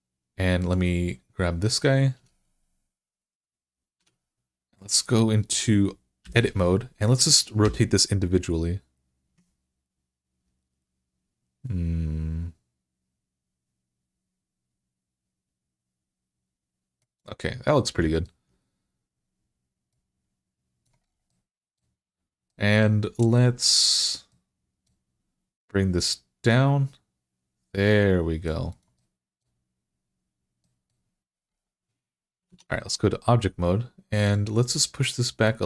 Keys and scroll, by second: 3.8 Tab, 6.1 i, 7.5 r, 32.3 Tab.